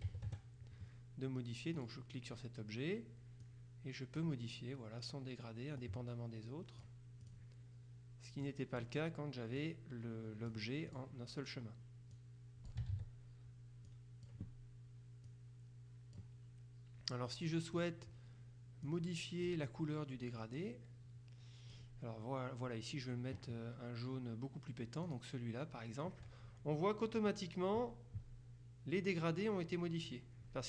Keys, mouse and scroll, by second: 0.1 KP_Subtract, 0.4 KP_Add, 1.8 click, 3.5 click, 5.9-7.9 drag, 8.5 click, 9.7-11.5 drag, 12.2 click, 13.0 ctrl+z, 14.0 click, 15.4 click, 17.8 click, 18.9 click, 20.4-22.3 drag, 25.2 click.